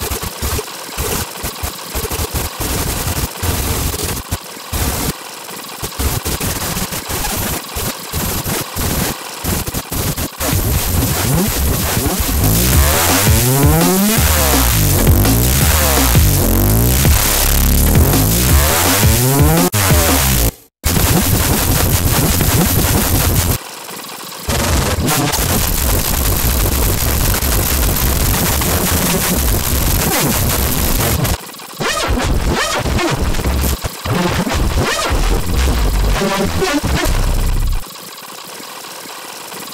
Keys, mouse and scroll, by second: 0.0-0.4 typing, 0.5 ctrl+z, 1.3 ctrl+z, 1.5 scroll up 2, 1.6 click, 1.6-4.1 typing, 1.7 click, 1.9 click, 2.5 alt+click, 2.9 click, 3.0 alt+click, 3.3 ctrl+click, 3.4 click, 3.6 scroll down 2, 3.6 click, 3.7 Delete, 3.7 ctrl+click, 4.5 click, 4.6 click, 5.0 right click, 5.0 ctrl+click, 5.1 scroll up 2, 5.1 click, 5.3 click, 5.5 shift+click, 5.6 click, 5.7 click, 6.2-10.4 typing, 6.3 click, 7.7 scroll down 2, 8.0 ctrl+click, 8.2 scroll up 2, 8.4 click, 8.6 scroll down 2, 8.7 click, 9.2 ctrl+click, 9.7 click, 9.8 click, 10.0 click, 10.3 ctrl+click, 10.3 scroll down 2, 10.5 click, 11.1 scroll down 2, 18.4 click, 19.5 space, 20.3 space, 20.7 click, 20.8 space, 20.9-21.4 scroll up 4, 23.2 scroll down 2, 23.5-27.6 typing, 23.8-24.3 scroll down 4, 24.4 click, 24.6 scroll up 2, 24.9 click, 25.1 scroll down 4, 25.2 click, 25.5 click, 25.6 scroll up 2, 25.7 click, 26.1 scroll up 2, 26.6 click, 27.0-27.3 scroll down 2, 27.4 scroll up 2, 27.6 click, 28.4-28.9 scroll down 4, 29.3-34.4 typing, 29.4 scroll down 2, 30.0 click, 30.1 scroll down 2, 30.5 click, 30.6 scroll up 2, 30.9 click, 31.0-31.5 scroll down 3, 31.1 click, 31.6 middle click, 31.7 middle click, 32.0 click, 32.3 click, 32.4 scroll down 2, 32.7 click, 33.3 click, 33.4 scroll down 2, 33.8 click, 34.5 scroll up 2, 36.0 click, 36.9 click, 37.0 space, 37.8 space, 37.8 click, 38.0 click, 38.1 s, 38.2 scroll down 2, 38.4 click, 38.8 click, 39.1 right click, 39.4 click, 39.5-39.7 typing, 39.6 right click.